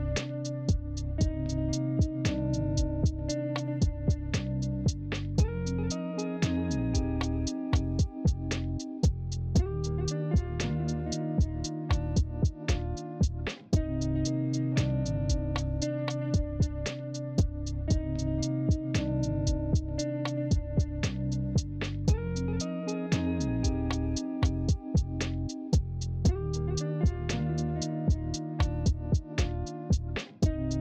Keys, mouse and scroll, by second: 23.5 ctrl+z, 25.0 ctrl+z.